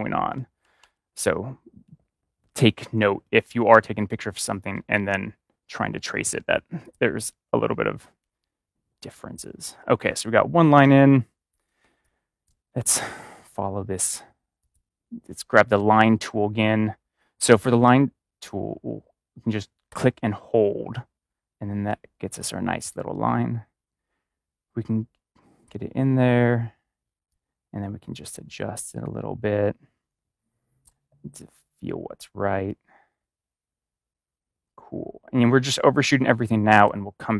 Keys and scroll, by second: 0.6 ctrl+-, 10.4 ctrl+-, 10.6 ctrl+=, 11.8-12.4 space.